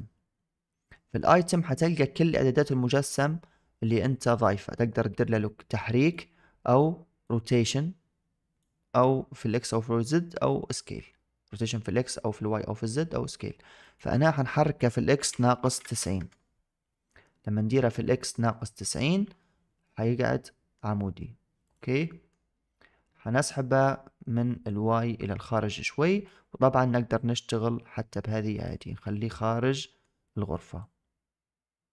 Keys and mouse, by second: 0.8 middle drag, 4.1 middle click, 5.0-6.1 drag, 7.2-8.5 drag, 13.8-16.1 drag, 19.7 middle click, 21.5 click, 22.0 middle drag, 23.3-23.7 middle drag, 24.5-26.1 drag, 27.0-28.5 drag, 28.8-29.9 middle drag, 30.7-31.9 drag.